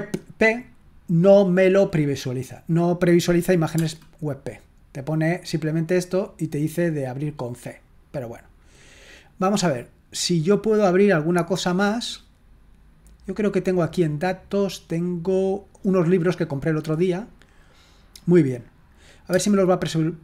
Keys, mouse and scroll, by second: 9.3 click, 13.0 click, 16.4 click, 16.8 click, 18.2 click.